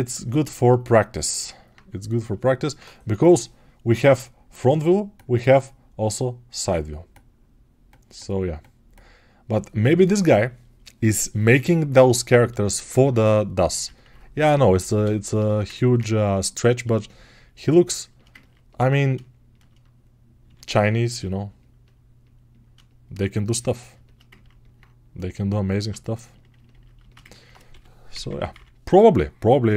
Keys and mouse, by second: 17.9-29.7 ctrl+alt+shift+right drag.